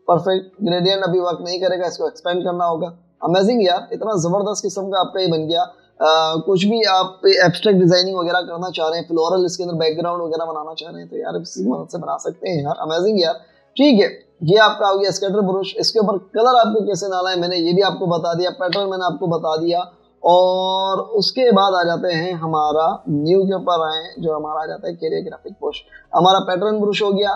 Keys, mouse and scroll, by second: 0.5 double click, 6.1 scroll down 1, 13.6 v, 15.3-16.1 typing, 16.3 shift+click, 19.8 Delete, 23.0 Delete.